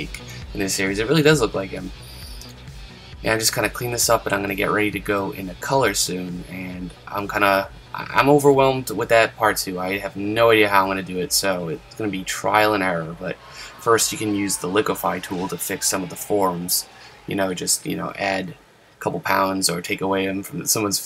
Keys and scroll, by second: 12.1 super+z, 15.8 super+z, 17.2 super+z, 20.2 super+z, 20.7 super+z.